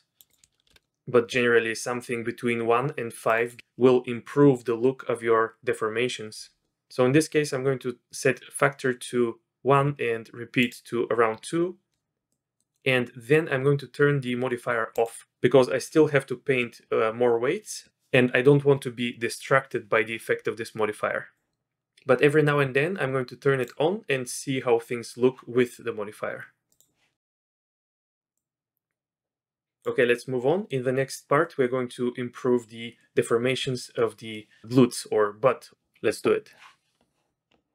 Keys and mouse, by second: 0.3-1.6 drag, 3.3 click, 10.6 click, 12.3 middle drag, 14.9 click, 26.7 click, 27.2-27.7 middle drag, 27.8 middle click, 28.3-29.8 drag, 30.1 middle click, 30.5 middle click, 31.4 drag, 34.3 drag.